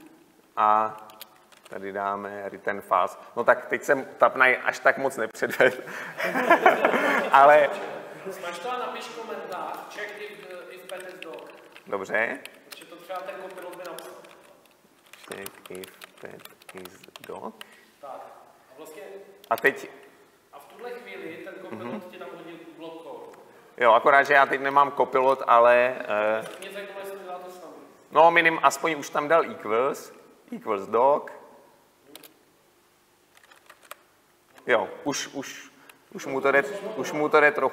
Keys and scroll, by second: 12.8 Delete, 29.2 Tab.